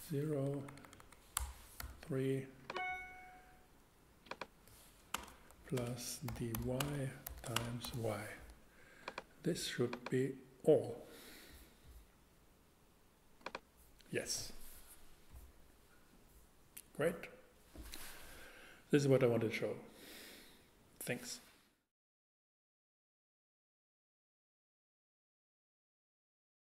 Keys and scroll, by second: 0.3 Right, 1.4 BackSpace, 1.8 3, 5.1-7.8 typing.